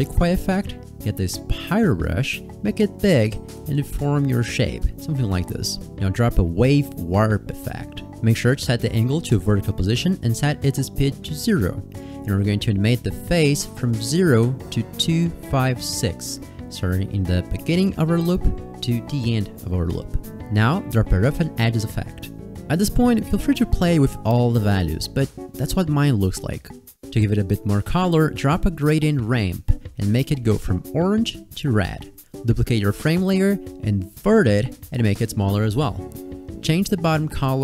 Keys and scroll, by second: 31.2 ctrl+z, 32.2 ctrl+d, 33.2 s.